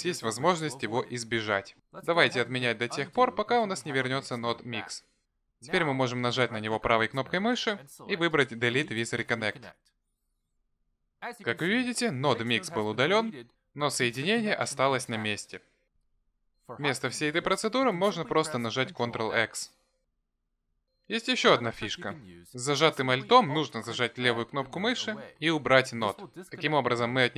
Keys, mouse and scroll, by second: 2.9 ctrl+z, 3.6 ctrl+z, 4.4 ctrl+z, 7.6 right click, 18.2 ctrl+z, 19.8 ctrl+x, 23.0 ctrl+z, 25.3 alt+click.